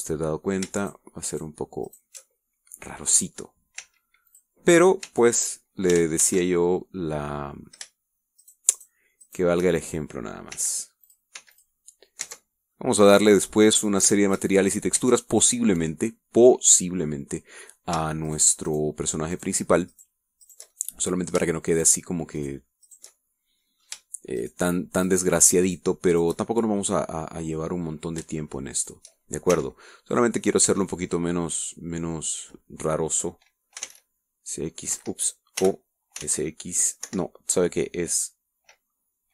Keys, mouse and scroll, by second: 1.9 alt+shift+right click, 2.4 alt+shift+right click, 3.0 alt+shift+right click, 3.3-4.7 alt+shift+middle drag, 4.9 w, 5.4 click, 6.2 w, 6.3 click, 7.1 ctrl+z, 8.4 click, 9.5 shift+right click, 9.9 shift+right click, 10.4 shift+right click, 10.8 shift+middle click, 11.3 click, 11.7 w, 12.2 click, 12.5 w, 12.6 click, 13.4 Tab, 13.6 scroll down 1, 13.9 click, 14.0-14.9 middle drag, 15.2 shift+scroll up 1, 15.3-16.0 shift+middle drag, 16.1 shift+Tab, 17.0-18.3 middle drag, 19.4 shift+right click, 19.8 shift+right click, 20.5 shift+right click, 21.0 shift+right click, 21.6 shift+right click, 21.9 shift+middle click, 22.8 shift+right click, 23.5 shift+right click, 24.0 shift+right click, 24.2 shift+middle click, 24.7 click, 25.5 shift+right click, 26.2 shift+right click, 26.8 shift+click, 27.2 shift+right click, 27.5-28.9 shift+middle drag, 29.9 shift+right click, 30.6 shift+w, 31.3 click, 31.8 w, 32.0 click, 34.9 s, 35.0 x, 36.1 Escape, 36.7 o, 37.4 x, 38.2 Escape.